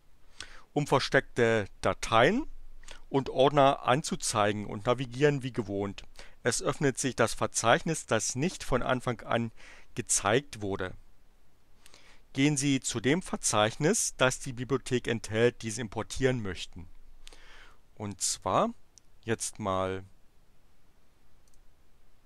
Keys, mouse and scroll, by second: 21.4 click.